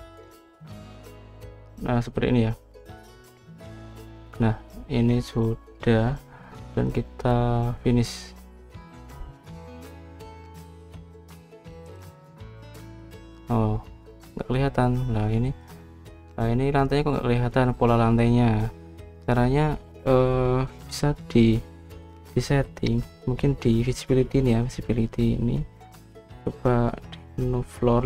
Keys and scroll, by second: 0.2 Escape, 1.1 Escape.